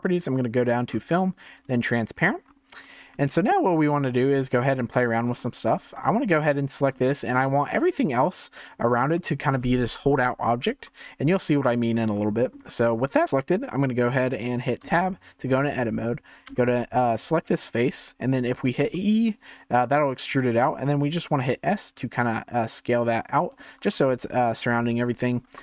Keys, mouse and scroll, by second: 0.5 drag, 0.8-1.5 scroll down 8, 1.5 click, 2.4-2.7 scroll up 3, 2.7 scroll down 2, 3.3-5.9 shift+middle drag, 5.9 click, 7.0-9.0 shift+middle drag, 9.0-9.4 scroll down 2, 11.2-12.1 scroll up 2, 12.1-14.8 shift+middle drag, 14.8 Tab, 16.5 3, 17.1 click, 18.8 e, 23.8 scroll down 3, 25.3 3, 25.5 click.